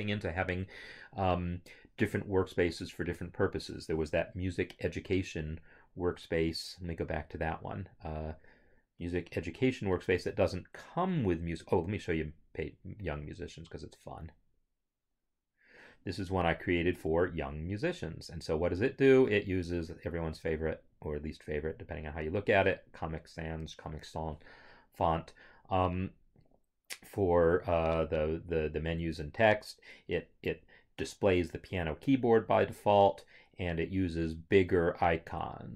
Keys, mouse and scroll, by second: 5.5 click, 13.3 click.